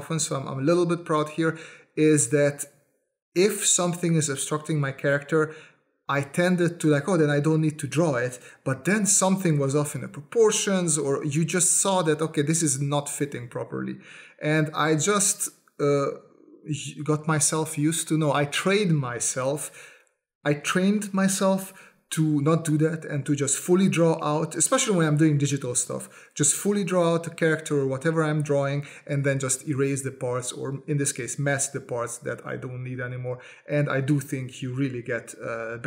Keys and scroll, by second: 6.0 space, 6.8 space, 6.9 s, 7.2 space, 8.4 space, 9.1 space, 10.3 space, 11.0 space, 11.5 space, 12.0 space, 13.9 space, 15.1-19.8 typing, 21.0 space, 23.2 s, 26.5 s, 28.0 space, 28.8 space, 29.0 s, 30.6-33.9 typing, 34.9 space, 35.7 space.